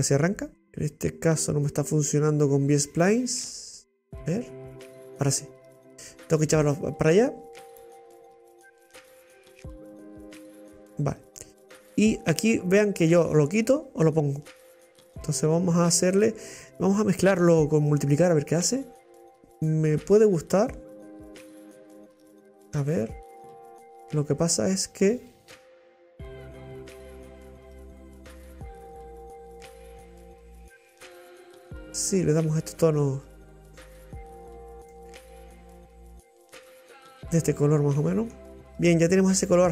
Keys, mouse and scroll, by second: 4.3-10.6 drag, 12.5-15.4 drag, 18.1 click, 20.8-26.1 drag, 26.4-31.6 drag, 34.0 scroll down 1, 34.1-37.1 middle drag, 38.4-39.4 middle drag.